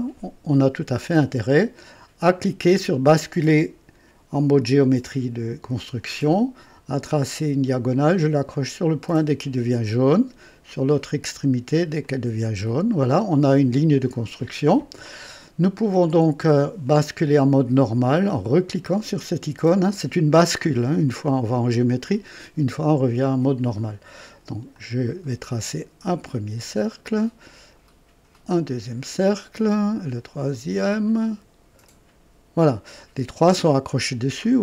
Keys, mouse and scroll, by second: 4.6 click, 7.1 click, 9.8 click, 12.0 click, 12.9 right click, 18.7 click, 24.7 click, 26.3 click, 27.1 click, 28.3 click, 29.4 click, 30.5 click, 31.8 click, 34.4 scroll up 1.